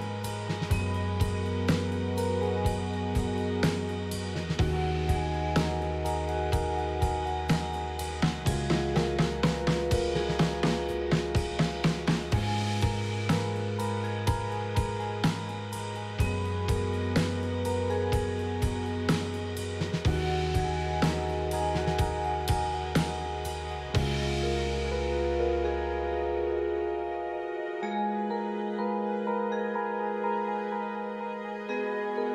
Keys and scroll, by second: 0.0-2.5 typing, 6.2 F4, 17.6-18.5 typing, 19.8 F3, 20.0 ctrl+z, 21.6 F3, 23.5 F3, 24.6 F3.